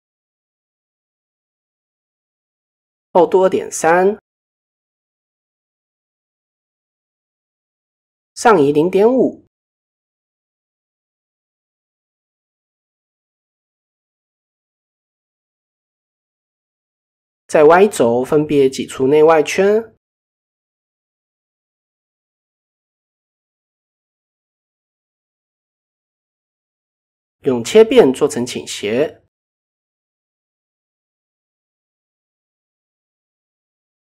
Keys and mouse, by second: 2.2-3.5 drag, 5.0 click, 6.5-8.3 drag, 11.0 KP_3, 12.6 a, 13.4-13.9 drag, 14.1 middle click, 15.6 drag, 16.1 click, 17.1 click, 17.5 click, 17.9 middle click, 18.6 alt+click, 20.0 e, 22.6 e, 24.2 KP_1, 24.5 KP_3, 25.7 click, 26.7-27.6 drag, 30.9 click.